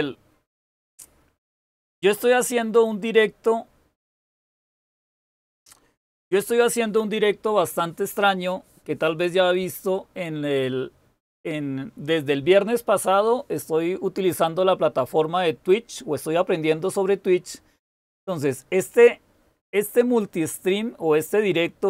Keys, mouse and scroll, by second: 5.6 super+w.